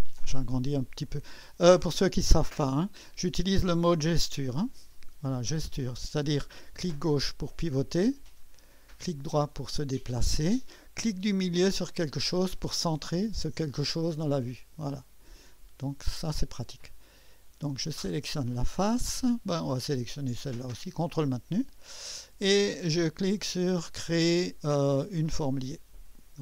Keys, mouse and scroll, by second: 0.0-0.6 scroll up 2, 0.6-3.2 drag, 4.6 click, 5.8-12.1 drag, 12.7-16.8 drag, 18.4 click, 21.3 click, 26.1 click.